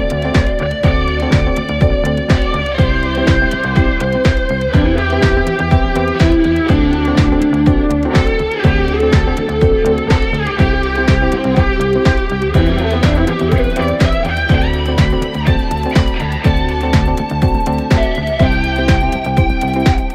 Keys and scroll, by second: 1.3 0, 8.2 3.